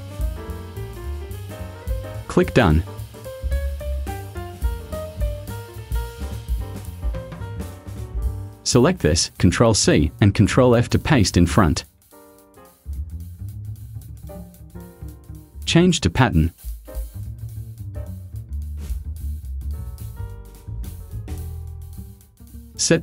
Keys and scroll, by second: 6.5 Delete, 9.9 ctrl+c, 11.6 ctrl+f.